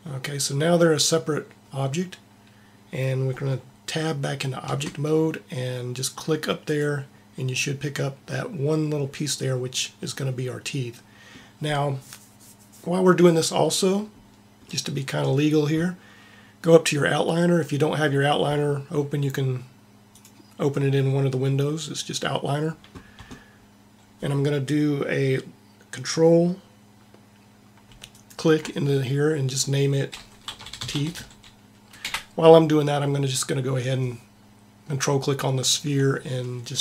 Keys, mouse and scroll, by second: 4.7 Tab, 22.5 Tab, 30.8 e, 35.6-36.8 drag.